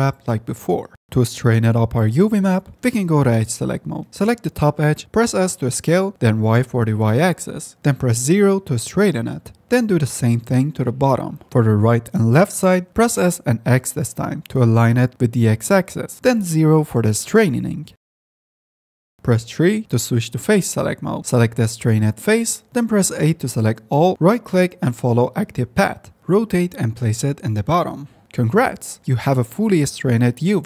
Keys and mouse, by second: 1.7 click, 2.3 3, 4.1 2, 5.4 s, 9.6 s, 14.4 s, 18.3 s, 21.1 3, 23.9 a, 25.7 click, 26.8 r, 27.5 g, 28.1 s, 28.9 s.